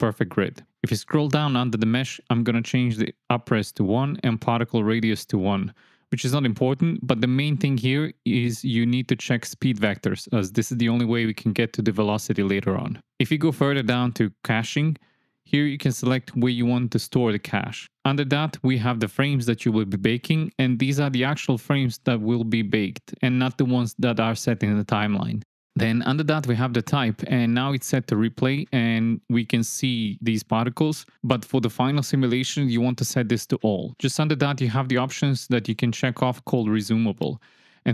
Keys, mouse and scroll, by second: 1.9 click, 5.5 click, 7.2 click, 7.7 KP_1, 8.8 click, 13.1-17.4 drag, 22.3 click, 33.1-34.5 drag.